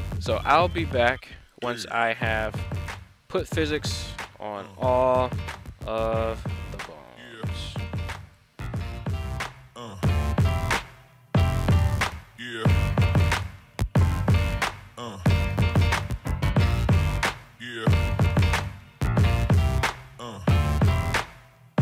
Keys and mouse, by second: 1.0-1.5 drag, 3.4-3.9 drag, 4.7 right click, 6.0-6.4 drag, 7.0 right click, 8.3 click, 8.9 middle click, 9.2 right click, 9.5 click, 9.8 middle click, 10.1 right click, 10.7 click, 20.0 middle drag, 20.4 right click, 21.1 right click, 21.3 middle click.